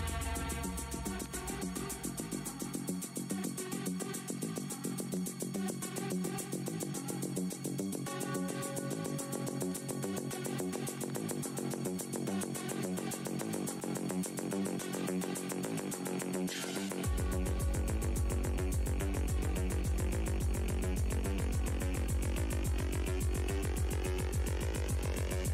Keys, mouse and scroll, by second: 3.6-4.1 scroll down 1, 4.4 scroll up 1, 4.6 z, 7.1 Delete, 10.7 right click, 11.1 click, 11.6 ctrl+right click, 15.9 click, 16.2 ctrl+right click, 19.3 alt+h, 19.3 w, 20.2 click, 20.5-24.4 typing, 21.2-22.2 scroll down 2, 22.8 click, 24.0 click.